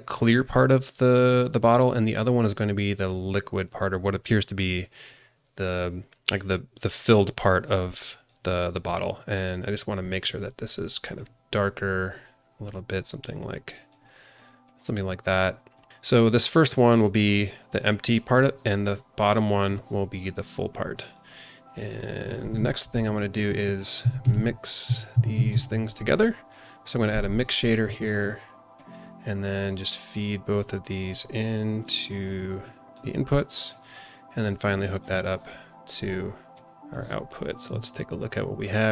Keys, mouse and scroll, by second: 2.4 click, 3.6 click, 4.6 click, 7.6-8.3 drag, 8.7-9.3 scroll up 1, 9.3 click, 14.6 click, 15.7 click, 19.6 click, 21.0 click, 21.9 click, 22.2 click, 23.3 shift+a, 27.3 click, 27.8 g, 28.7 drag, 29.6-30.5 drag, 31.1-31.8 drag, 32.2-32.9 drag, 33.7 click, 34.4-35.0 drag, 36.5 click, 37.4 scroll down 1, 37.7 z.